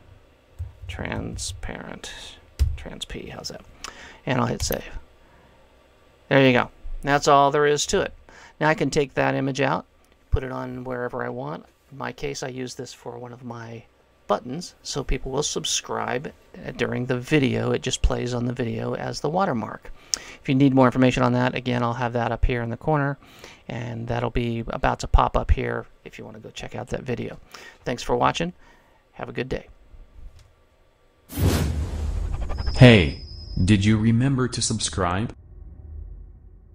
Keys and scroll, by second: 0.0-2.6 typing.